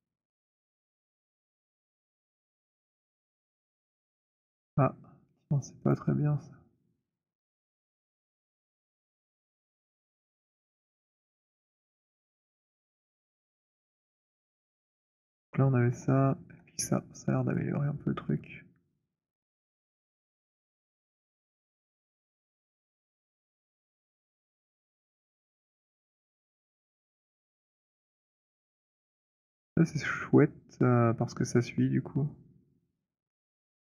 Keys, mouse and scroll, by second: 2.1 alt+click, 3.0 alt+click, 3.0 alt+middle click, 3.3 alt+middle click, 5.8 click, 5.8 alt+scroll, 7.1 alt+right click, 7.1 alt+middle click, 7.5 alt+middle click, 8.0 alt+right click, 8.5 alt+click, 9.2 alt+middle click, 11.1 click, 11.7 alt+right click, 12.8 alt+click, 13.1-13.7 scroll, 14.4 alt+click, 14.4 z, 15.8 z, 19.1 click, 20.8 click, 22.3 alt+click, 29.1 click, 32.7 click, 33.4 alt+click.